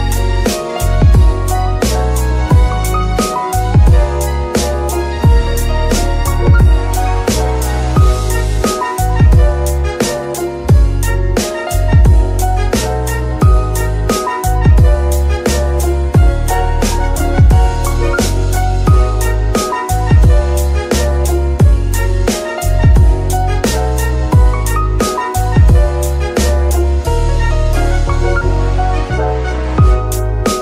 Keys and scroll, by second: 1.4 g, 1.6 y, 2.6 r, 6.3 Escape, 6.9 g, 7.4 Escape, 8.5 KP_0, 8.6 KP_Decimal, 8.8 KP_3, 8.9 Return, 9.9 g, 12.5 Escape, 15.8 g, 16.0 y, 23.7 g, 23.8 y, 29.7 g, 29.8 y.